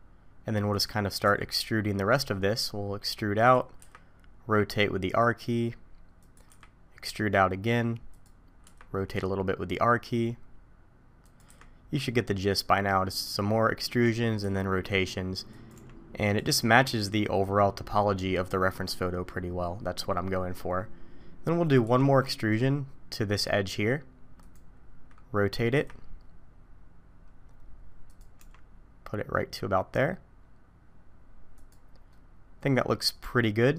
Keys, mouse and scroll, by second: 1.3 e, 3.8 r, 6.5 e, 8.6 r, 11.5 e, 14.4 r, 15.7 g, 21.9 e, 25.7 r, 28.4 g, 32.1 middle click.